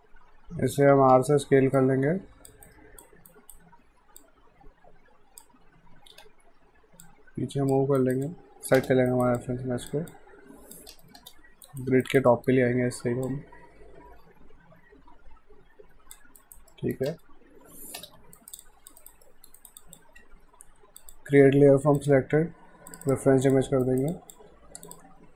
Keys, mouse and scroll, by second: 1.0 r, 1.8 click, 2.7 alt+right click, 4.2 click, 6.1 w, 7.0 click, 8.0 alt+right click, 8.3 alt+click, 8.8 space, 9.1 alt+right click, 9.4 alt+click, 11.0 space, 11.7 alt+right click, 12.3 alt+middle click, 13.3 click, 16.4 alt+right click, 16.7 alt+middle click, 17.1 space, 18.4 alt+right click, 18.6 alt+click, 19.0 alt+right click, 19.3 alt+middle click, 19.6 alt+right click, 19.8 alt+click, 20.2 q, 21.0 click, 23.9 right click, 24.1 click.